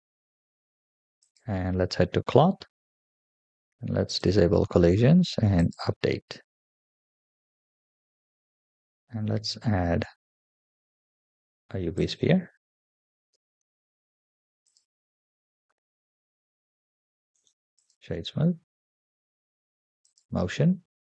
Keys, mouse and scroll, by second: 1.3 click, 1.9-2.9 scroll down 5, 4.0 click, 5.4 click, 9.7 shift+a, 13.2 g, 14.9-15.6 middle drag, 17.2 right click, 19.0-19.9 scroll up 2, 19.9 click, 20.9-21.0 scroll down 2.